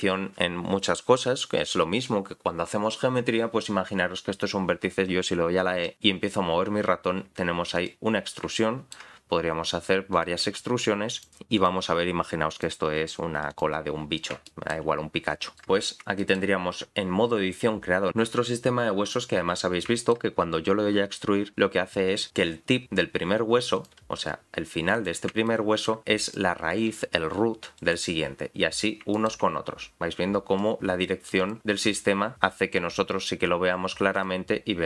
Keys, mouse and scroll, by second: 3.3-4.1 scroll down 3, 5.9 e, 8.5 shift+middle click, 9.2 e, 14.0-14.5 scroll down 3, 14.5 shift+middle click, 15.5 middle click, 15.9 scroll up 4, 16.2 shift+middle click, 17.4-18.1 scroll down 1, 18.1 middle click, 19.0 click, 20.0 shift+middle click, 20.4-21.1 scroll up 2, 21.4-22.0 scroll up 1, 22.0 click, 23.7 click, 24.2 g, 25.5 shift+middle click, 26.2 click, 26.9 g, 28.7-29.1 scroll down 4, 29.1 shift+middle click, 31.4 click, 34.1 click.